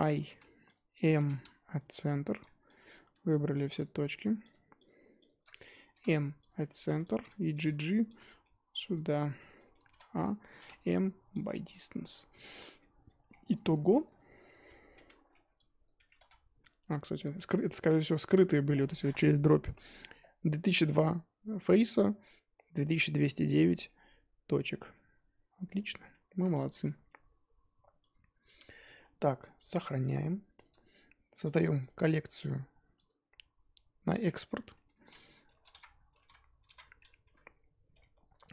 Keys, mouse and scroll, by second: 0.3 i, 2.0 m, 2.3 1, 2.7 click, 2.9-3.6 scroll up 1, 3.7 shift+click, 4.4 shift+click, 6.5 m, 7.1 click, 7.6 g, 8.4 middle click, 8.8 scroll down 1, 9.0 shift+middle click, 9.9 a, 11.4 m, 11.7 Tab, 12.4 scroll down 2, 12.5-13.0 middle drag, 13.0-13.5 scroll down 8, 13.6 Tab, 14.5 alt+h, 15.3 Tab, 15.5 click, 15.9 Tab, 16.2 a, 17.2 alt+h, 17.6 click, 18.3 a, 23.6-25.1 middle drag, 25.1-26.0 scroll up 1, 26.3 Tab, 26.6 click, 26.8-28.0 middle drag, 28.0 click, 28.6-29.0 scroll down 4, 29.0-31.5 middle drag, 31.5 click, 31.8-34.1 right drag, 34.1 click, 37.2 F2, 37.9-38.5 middle drag.